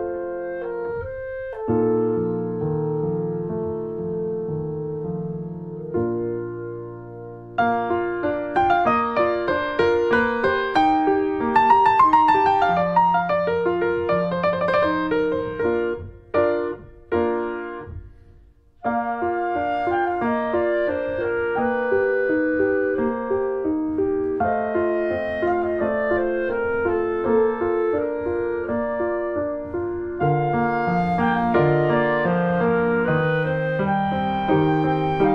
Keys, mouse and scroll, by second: 0.2 2, 0.4 click, 1.3 3, 1.4 click, 2.3 x, 4.0 Tab, 4.2 1, 4.5 click, 4.9 alt+middle click, 5.8 shift+middle click, 5.9-6.3 shift+scroll up 1, 6.3 click, 7.3 click, 7.9 Tab, 8.1-8.7 scroll down 2, 8.3 middle click, 8.7 middle click, 9.2 ctrl+s, 9.3 click, 9.7 ctrl+1, 10.0 ctrl+2, 10.3 click, 10.4 scroll down 1, 10.6 middle click, 11.4 ctrl+3, 11.7 click, 11.9 scroll down 1, 12.0 middle click, 12.3 click, 12.5 middle click, 12.9 ctrl+s, 13.2 middle click, 13.5 click, 13.7 middle click, 14.4 ctrl+s, 14.5 middle click, 15.1 click, 15.4 scroll up 2, 15.5-16.5 middle drag, 16.5 ctrl+s, 16.7 middle click, 17.1 click, 17.9 alt+h, 18.2 click, 18.5 middle click, 19.0 click, 19.2 scroll down 2, 19.4 middle click, 20.3 ctrl+s, 20.4 click, 20.5 middle click, 21.2 click, 21.4 middle click, 22.0 ctrl+s, 22.7 middle click, 23.0 click, 23.3-24.9 middle drag, 24.9-35.3 drag.